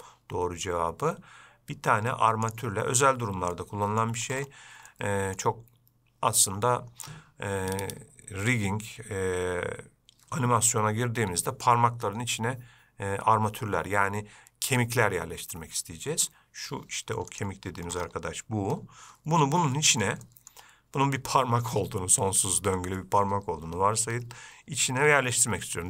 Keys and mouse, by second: 2.7 click, 3.8-4.3 shift+middle drag, 5.2-5.7 shift+middle drag, 20.0 middle click, 20.5 shift+middle drag.